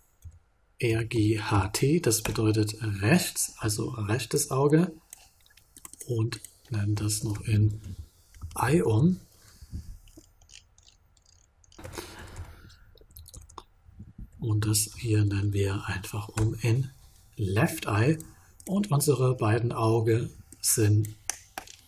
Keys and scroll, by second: 0.8 g, 1.1 h, 7.1 shift+-, 7.7 e, 8.7 e, 8.8 Return, 11.8 l, 13.3 shift+-, 14.1 e, 15.2 e, 16.3 Return.